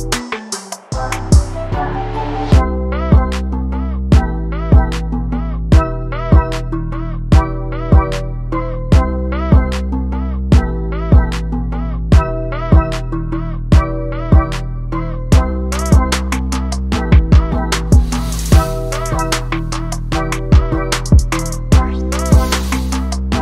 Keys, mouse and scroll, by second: 0.3 click, 0.7-1.2 scroll down 5, 0.9 shift+middle click, 1.2 scroll up 4, 1.4 shift+middle click, 2.1-4.6 drag, 4.6-5.3 scroll down 6, 5.3-5.6 scroll down 3, 7.0 ctrl+space, 7.4 shift+middle click, 7.5 scroll up 1, 8.5 z, 14.0 z, 14.3 scroll up 1, 14.4 shift+middle click, 14.7 click, 17.1 ctrl+space, 17.4 scroll down 2, 17.5 scroll up 1, 17.9 click, 21.5-23.0 drag.